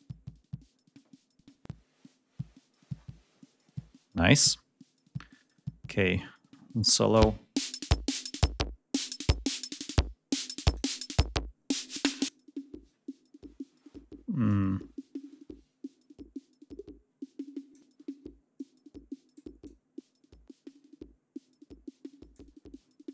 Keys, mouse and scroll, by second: 6.9 click, 8.8 click, 10.5 click, 12.0 click, 14.3-17.7 drag, 18.4-19.4 drag, 19.4-22.3 drag.